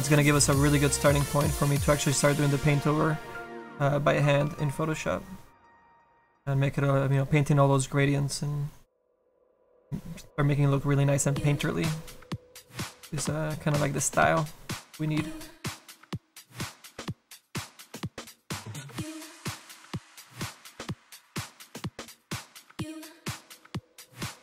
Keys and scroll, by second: 21.2 s, 21.7 s.